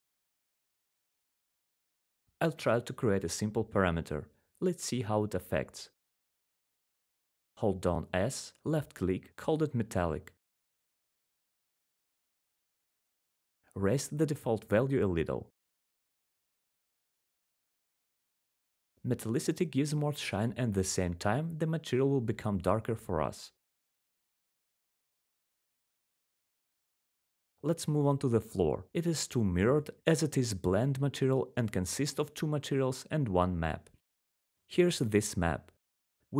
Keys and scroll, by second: 6.5-9.5 typing, 11.0-13.2 typing, 28.6-29.2 typing.